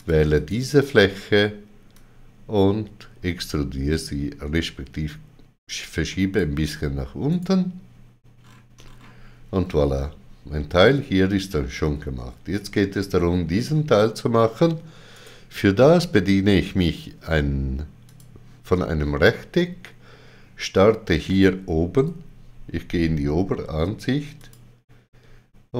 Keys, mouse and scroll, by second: 0.0 shift+click, 0.3 click, 7.3 right click, 8.4-8.8 scroll down 3, 15.2 right click, 18.1 click, 24.4 click.